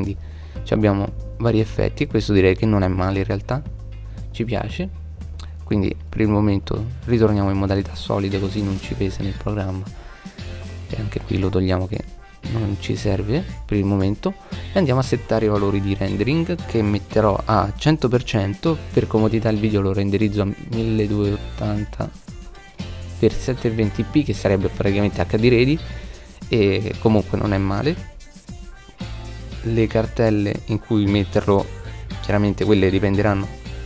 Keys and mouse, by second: 1.0 middle click, 2.2-3.6 middle drag, 5.4 click, 6.0-8.0 middle drag, 8.0 click, 10.6 click, 12.3 middle click, 21.6 click, 23.6-25.1 middle drag, 26.2-28.7 middle drag, 29.3 click, 31.1-33.3 middle drag.